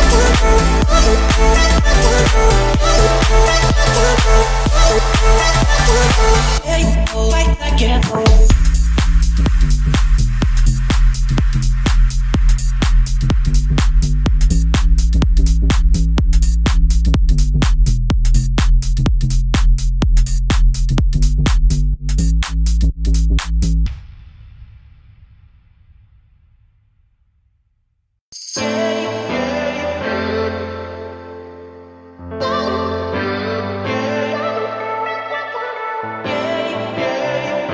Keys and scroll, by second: 1.0 Return, 2.7 5, 5.7 Escape, 8.2 o, 22.9 Escape, 23.8 o, 24.5 Escape, 25.9 Escape.